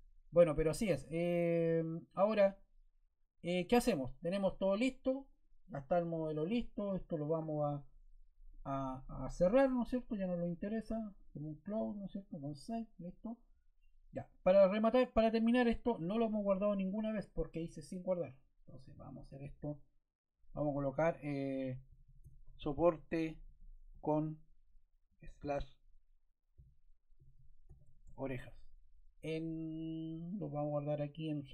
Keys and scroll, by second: 21.0 Caps_Lock.